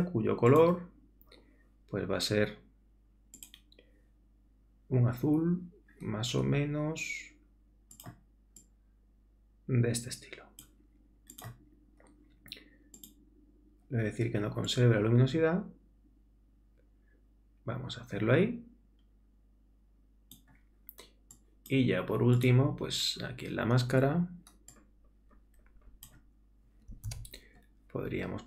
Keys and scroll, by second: 27.1 super+z.